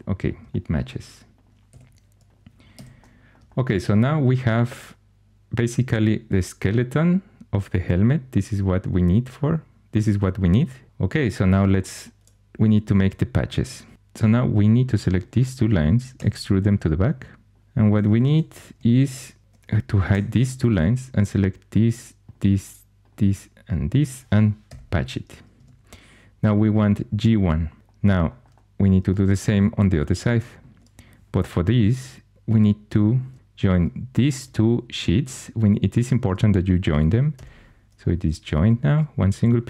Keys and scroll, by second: 1.6 2, 2.7 x, 16.1 e, 18.1 shift+super+e, 18.6 shift+super+e, 20.0 h, 24.6 shift+super+p, 25.5 Tab, 32.8 4, 37.3 j.